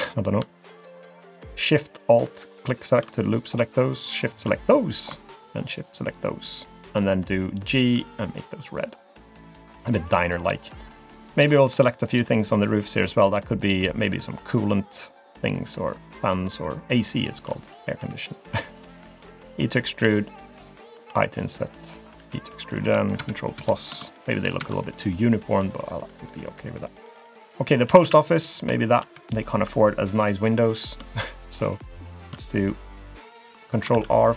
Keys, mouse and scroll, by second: 0.0 alt+click, 0.8 alt+shift+click, 1.5 alt+click, 2.1 alt+click, 2.8 alt+click, 3.2 middle click, 3.4 scroll down 1, 4.1 shift+click, 4.3 shift+click, 4.6 middle click, 5.8 shift+click, 6.0 shift+click, 6.7 shift+click, 7.0 middle click, 8.0 g, 9.0-9.7 scroll down 2, 9.4 click, 9.7 middle click, 10.3-10.6 scroll down 1, 10.6 middle click, 11.5 click, 12.0 shift+click, 12.4 shift+click, 12.9 click, 13.6 click, 14.3 click, 15.9 shift+click, 16.3 shift+click, 16.6 shift+click, 16.9 shift+click, 18.0 e, 21.1 i, 22.2 e, 23.2 ctrl+KP_Add, 23.6 ctrl+KP_Add, 24.5 ctrl+KP_Add, 25.6 g, 26.4 click, 27.4 click, 27.9 a, 28.0 a, 28.3 scroll up 1, 28.4 middle click, 28.8 shift+middle click, 29.3 alt+click, 31.6 shift+click, 31.9 alt+click, 33.9 ctrl+r.